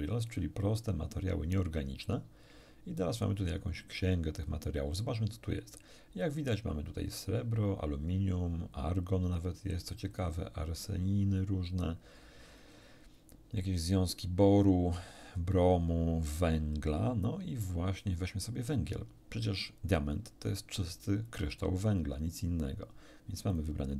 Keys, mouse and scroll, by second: 0.3 click, 4.3 click, 11.0-11.8 scroll down 1, 12.3 scroll down 1, 14.7-15.0 scroll down 1, 15.7-16.3 scroll down 1, 21.5 click, 23.5 click.